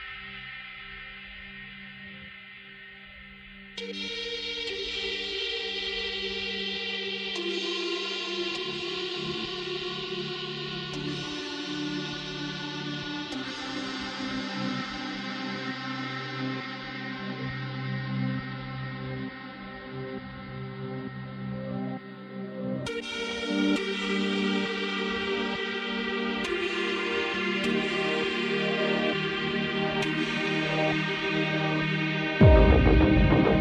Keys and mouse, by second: 2.6 ctrl+z, 5.4 ctrl+z, 8.6 ctrl+z, 8.9 ctrl+z, 9.1 ctrl+z, 9.3 ctrl+z, 9.7 right click, 10.1 ctrl+z, 10.8 ctrl+z, 11.2 ctrl+z, 11.4 ctrl+z, 11.5 ctrl+z, 11.8 ctrl+z, 12.0 ctrl+z, 12.3 ctrl+z, 13.3 ctrl+z, 13.5 ctrl+z, 13.6 ctrl+z, 14.1 ctrl+z, 14.2 ctrl+z, 14.4 ctrl+z, 14.5 ctrl+z, 14.8 ctrl+z, 17.1 ctrl+z, 17.3 ctrl+z, 17.6 ctrl+z, 17.8 ctrl+z, 17.9 ctrl+z, 18.2 ctrl+z, 18.8 ctrl+z, 18.9 right click, 20.7 ctrl+z, 20.8 ctrl+z, 28.8 ctrl+z, 30.5 ctrl+z, 31.9 ctrl+z, 32.0 ctrl+z, 32.2 ctrl+z, 32.6 ctrl+z.